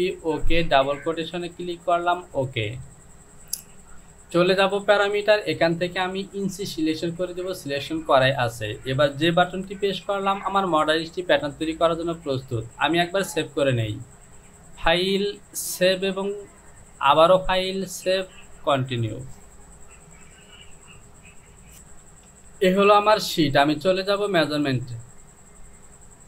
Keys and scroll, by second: 9.0 j, 21.2 F6, 21.9 Home.